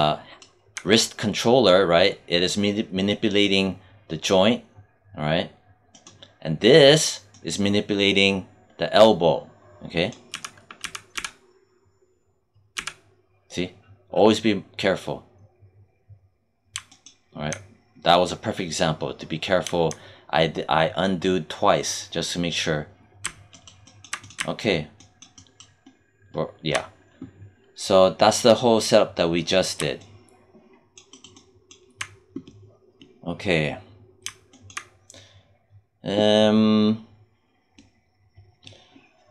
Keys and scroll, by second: 10.2 z, 12.6 z.